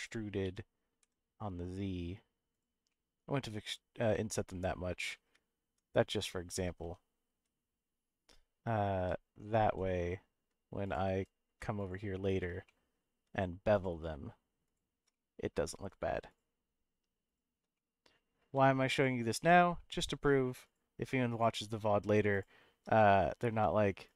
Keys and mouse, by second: 0.4 e, 1.0 z, 2.5 click, 2.9 middle click, 4.1 middle click, 5.1 middle click, 6.8 2, 7.3 1, 9.0 w, 9.6 2, 10.8 alt+click, 11.8 click, 12.6 middle click, 13.7 alt+shift+click, 15.1 middle click, 17.7 middle click, 18.9 alt+shift+click, 19.4 middle click, 22.9 middle click, 24.0 alt+shift+click.